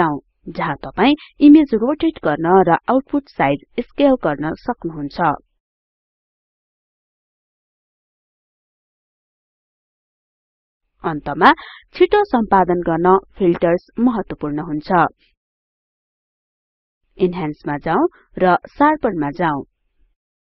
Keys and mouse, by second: 0.1 click.